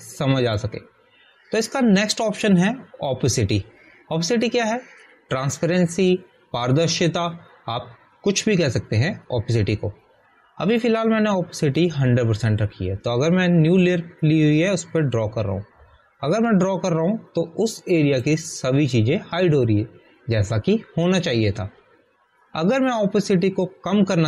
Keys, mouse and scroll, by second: 0.2 Return, 2.3 click, 12.8 click, 15.8 click.